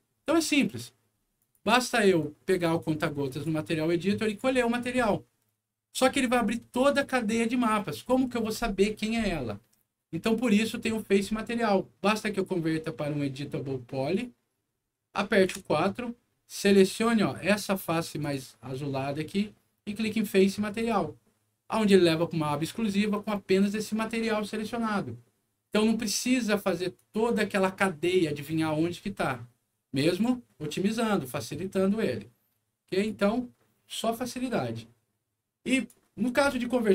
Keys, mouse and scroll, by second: 1.3 click, 2.1 click, 3.2 click, 4.2 click, 5.9-6.8 scroll down 3, 10.5 click, 12.2 right click, 14.0 click, 14.9 middle click, 15.4 4, 16.2 scroll up 1, 16.5 click, 18.1 click, 20.7 click, 22.5 middle click, 26.9 click, 32.9 click, 35.7 click.